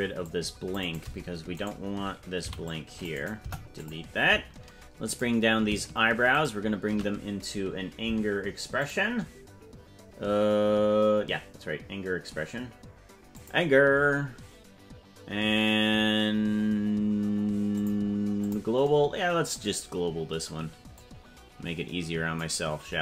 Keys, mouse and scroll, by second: 1.6 right click, 2.4 c, 3.4 Delete, 5.3 right click, 6.5 shift+right click, 8.8 click, 13.3 click, 17.7 click, 21.0-22.4 drag.